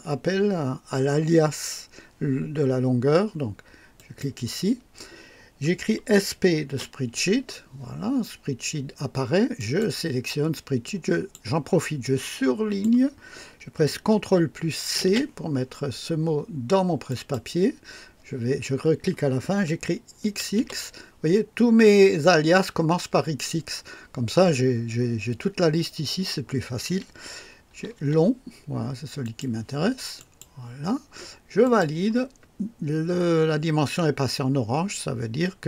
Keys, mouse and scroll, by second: 4.0 click, 6.3-7.2 typing, 9.6 click, 10.8 click, 12.0 click, 15.0 c, 17.1 click, 20.3 typing, 27.7 typing, 29.2 click, 30.2 click, 31.6 click.